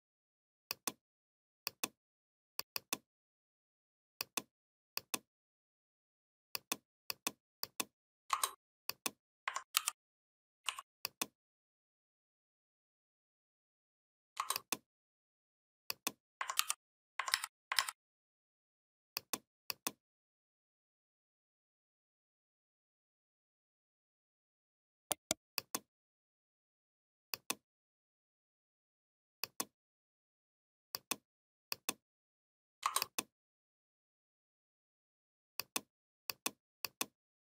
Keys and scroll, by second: 9.5 ctrl+g, 16.3 ctrl+g, 17.1 ctrl+a.